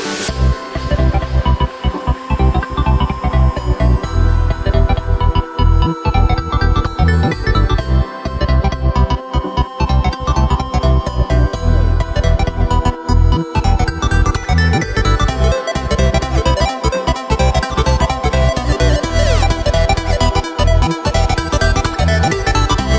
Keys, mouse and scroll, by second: 1.3-1.7 scroll up 2, 1.7 right click, 1.9 Tab, 2.4 2, 2.9 right click, 3.4 alt+shift+right click, 3.6 alt+shift+right click, 4.0-5.6 middle drag, 5.6 alt+shift+right click, 6.4 f, 6.6-6.9 scroll down 3, 6.9 Tab, 7.2 right click, 7.6-9.2 middle drag, 9.2 right click, 9.7 middle click, 10.1 g, 12.7 KP_1, 14.0 alt+d, 14.3 g, 16.6-17.2 scroll down 3, 17.2-19.3 scroll up 6, 19.3 right click, 19.7-21.3 middle drag, 21.3-22.1 scroll down 5, 22.1 KP_0, 22.9 scroll up 1.